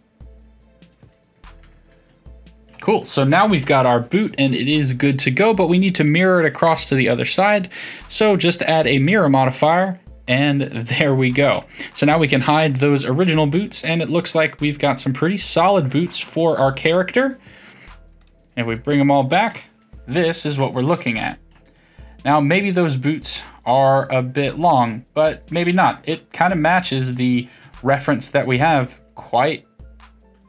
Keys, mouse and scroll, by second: 1.6 Tab, 2.0-4.9 middle drag, 4.9-6.8 scroll down 3, 6.8-9.7 drag, 9.7-11.5 middle drag, 11.5 click, 12.7 click, 13.3-16.4 middle drag, 16.4-17.8 scroll down 10, 18.2 click, 18.7-20.5 middle drag, 20.5-21.3 scroll up 5, 21.3-24.7 shift+middle drag, 26.4 KP_3, 27.6 KP_1.